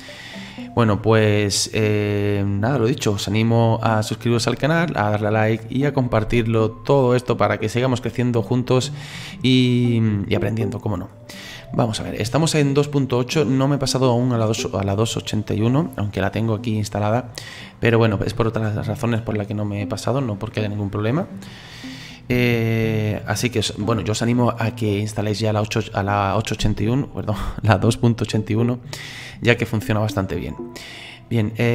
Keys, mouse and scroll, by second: 18.3-31.7 middle drag.